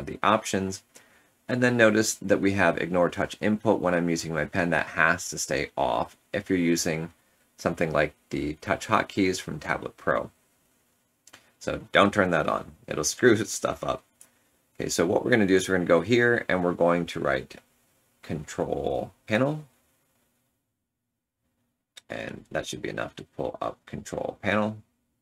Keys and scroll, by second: 22.4 Return.